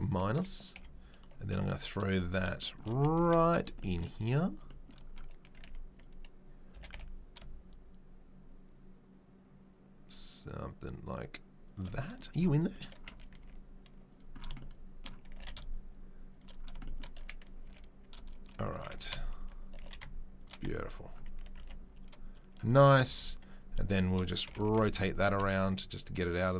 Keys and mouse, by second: 0.7 KP_1, 1.5 KP_3, 3.2 s, 5.5 s, 6.7 g, 13.4 s, 15.2 g, 17.6 s, 18.7 s, 19.7 g, 20.6 z, 21.2 Tab, 21.6 Tab, 23.0 KP_3, 24.4 r, 25.3 g.